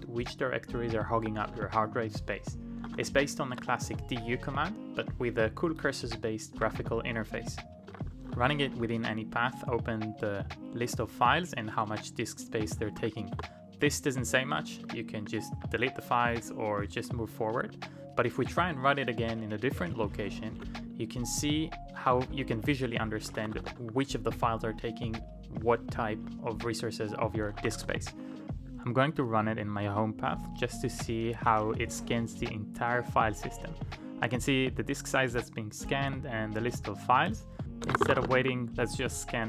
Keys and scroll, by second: 1.1 Return, 1.1-1.4 typing, 1.4 Return, 2.8-3.5 typing, 3.9 Return, 6.3-8.8 typing, 10.8 typing, 12.3-20.5 typing, 21.9-24.1 typing, 25.6-28.9 typing, 26.1 ctrl+d, 37.6-38.7 typing.